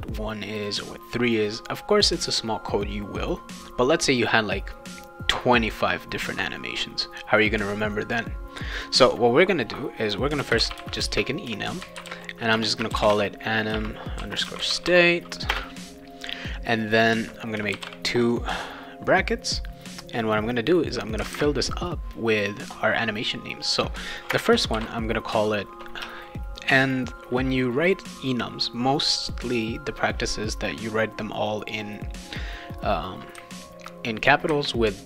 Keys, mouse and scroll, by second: 0.7 click, 8.0 click, 8.7 click, 10.2-15.5 typing, 17.7 shift+[, 24.3 space, 24.8 shift+p, 26.0 Caps_Lock.